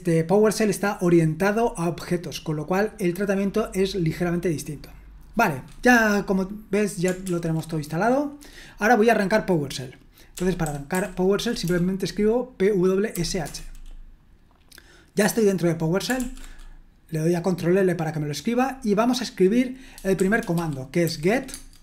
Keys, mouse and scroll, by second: 7.2 ctrl+l, 10.4-11.7 typing, 13.4 Return, 13.4 typing, 16.2 ctrl+l, 20.3-21.1 typing, 21.5 Tab.